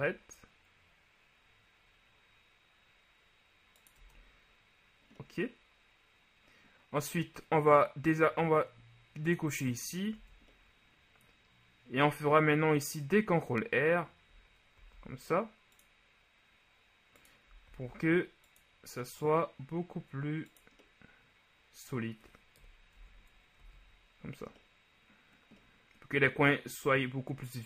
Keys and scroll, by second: 4.1 Tab, 10.3 Tab, 14.9 ctrl+r, 17.8 ctrl+r, 23.1 Tab, 23.7 a.